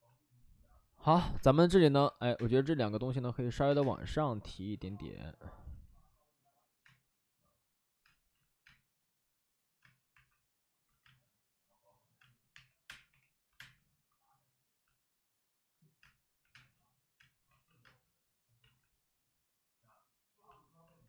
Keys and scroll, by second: 1.2 space, 1.8 x, 1.8 c, 2.3 space, 3.6 3, 3.7 space, 4.8 ctrl+z, 5.6 ctrl+z, 6.7 space, 8.0 space, 8.2 ctrl+z, 8.5 space, 9.7 space, 10.0 1, 10.8 ctrl+z, 10.9 space, 12.1-13.4 typing, 15.9-17.7 typing, 17.4 ctrl+z, 18.5 ctrl+z.